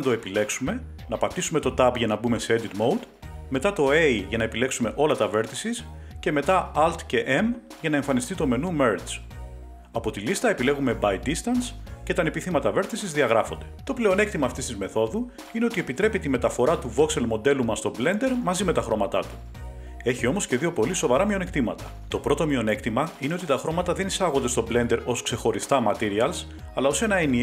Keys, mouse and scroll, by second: 1.0 Tab, 2.7 a, 12.2 click, 17.2 Tab, 18.7 right click, 20.1 click, 24.1 click, 25.6-25.9 scroll, 26.6-27.3 scroll.